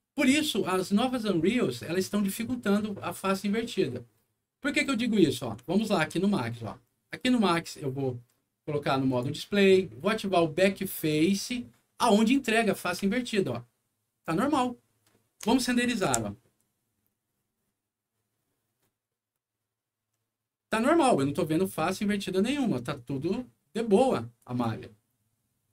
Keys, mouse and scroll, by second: 5.6 alt+middle click, 6.3 alt+middle click, 7.0 alt+click, 9.0 alt+click, 11.0 click, 13.1-15.5 alt+middle drag, 15.6 alt+middle click, 16.0 F9, 22.3 scroll up 2, 23.1 scroll down 2, 24.3 click.